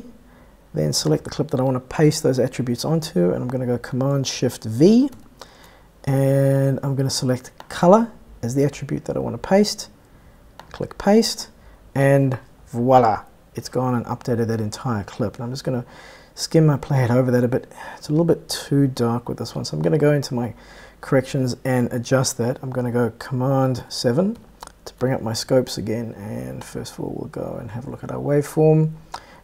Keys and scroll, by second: 5.6 shift+super+v, 24.8 super+7.